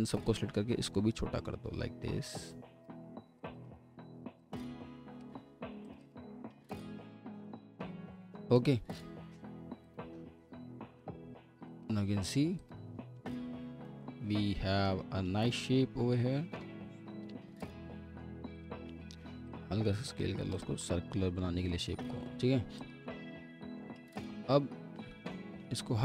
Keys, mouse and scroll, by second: 3.5 double click, 5.4 ctrl+z, 6.0 double click, 12.2 scroll down 1, 13.1 F4, 13.5 scroll down 1, 14.1 alt+middle click, 16.9-17.6 alt+scroll up 1, 17.6 alt+middle click, 20.8 alt+middle click, 21.7 alt+middle click, 22.1-23.0 scroll up 1, 23.2 alt+middle click, 25.1 typing.